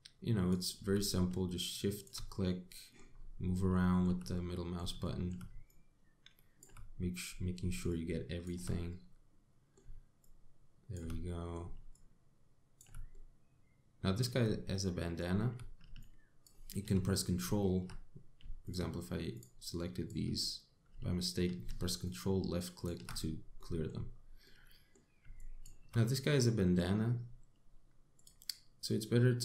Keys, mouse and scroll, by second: 0.2 shift+click, 2.0 shift+click, 3.1 middle click, 3.8-4.2 scroll down 5, 4.4 shift+middle click, 5.0 middle click, 5.7 shift+middle click, 6.3 shift+click, 7.6-8.0 scroll up 6, 8.5 shift+click, 9.5 middle click, 10.8 shift+click, 11.9 middle click, 12.6 shift+click, 13.7 middle click, 15.0 scroll down 2, 15.5 middle click, 16.6 ctrl+click, 19.3 shift+click, 20.0 shift+click, 20.4 shift+click, 22.7 ctrl+click, 24.2 middle click, 24.7-25.1 scroll up 2, 25.1 middle click, 26.0 shift+click, 26.7 middle click, 28.8 click.